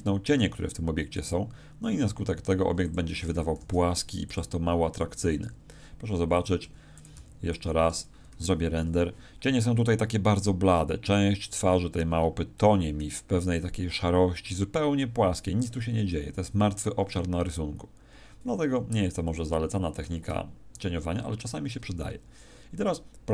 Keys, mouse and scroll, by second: 1.3 click, 1.9 g, 2.9 click, 3.2 r, 4.3 click, 5.1 right click, 5.4 g, 6.6 click, 6.6 r, 7.0 click, 7.1 g, 7.5 click.